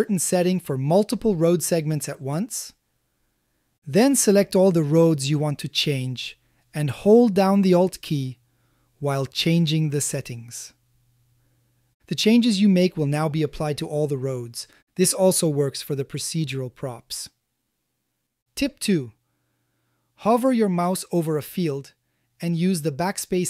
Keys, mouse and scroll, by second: 4.5 shift+click, 8.4-9.9 alt+drag, 10.7-11.5 alt+drag, 12.2-13.3 alt+drag, 14.0-15.0 alt+drag, 16.1-17.2 alt+drag, 23.2 BackSpace.